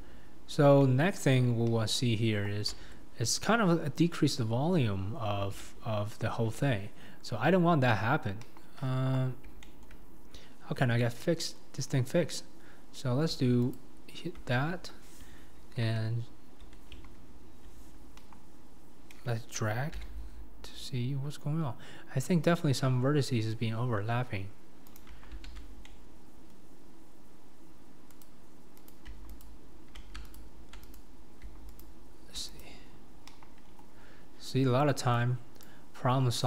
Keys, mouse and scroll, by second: 0.8 scroll down 1, 0.8-1.7 middle drag, 1.7 KP_1, 2.9 Tab, 3.5-4.0 scroll up 4, 4.0-6.5 middle drag, 6.5-8.1 scroll up 2, 8.1-8.4 scroll down 2, 8.4 KP_1, 8.8-9.6 scroll down 4, 9.6 shift+middle click, 10.6-11.0 scroll up 2, 11.0 middle click, 11.8-13.4 scroll up 3, 13.8 alt+click, 20.0 g, 25.3 alt+z, 25.8-26.9 middle drag, 28.2 click, 28.9 click, 29.4 alt+click, 30.4 alt+click, 31.0 click, 32.9-33.3 scroll down 2, 33.3 KP_1, 33.6-34.0 scroll down 2, 34.0-35.0 scroll up 8, 35.0 scroll up 1, 35.2 click.